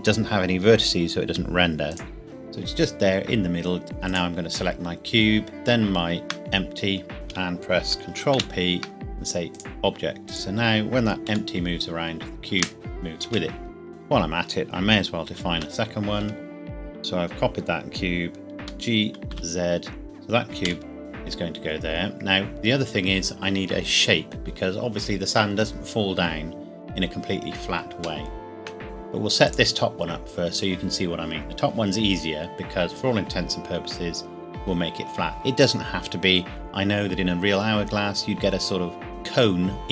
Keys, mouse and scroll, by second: 1.9 click, 2.2-3.3 scroll down 1, 4.0 click, 5.6 shift+click, 8.0 ctrl+Num_Lock, 8.3 ctrl+p, 9.6 click, 11.3 g, 13.2 Escape, 13.9 click, 14.6-15.2 scroll down 1, 15.2 shift+d, 16.2 Escape, 19.1 g, 19.3 z, 20.6 KP_1, 21.0-21.5 scroll up 1, 21.7 scroll down 1, 28.0 scroll down 1, 28.2 shift+middle click, 29.5 click, 37.7-39.1 scroll up 1, 39.1 middle click.